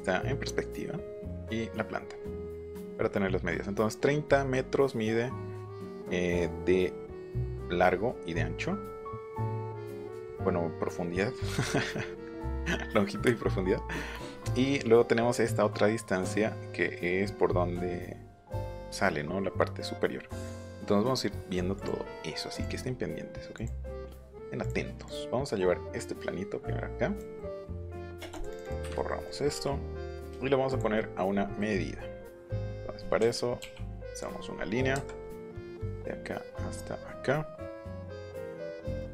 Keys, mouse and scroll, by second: 21.7 click, 22.5 click, 23.5 click, 24.6 click, 25.0-27.2 drag, 27.4 middle click, 28.2 space, 28.3 click, 28.5 click, 29.0 middle click, 29.3 click, 29.5 m, 30.0 click, 30.7 click, 34.9 Right.